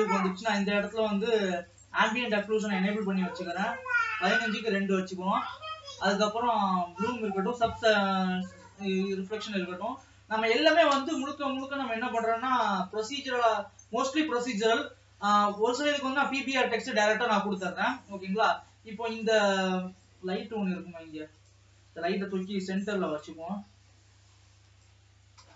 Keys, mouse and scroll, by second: 1.9 click, 2.4-5.5 drag, 7.6-9.3 drag, 9.3 ctrl+s, 17.7-21.5 middle drag, 21.5 click, 23.0 g.